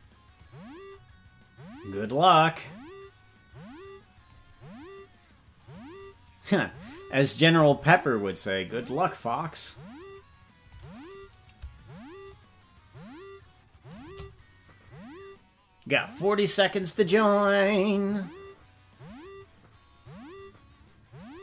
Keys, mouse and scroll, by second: 2.0-4.3 drag, 5.7-6.7 drag, 9.2-10.8 drag, 12.3-14.0 shift+drag.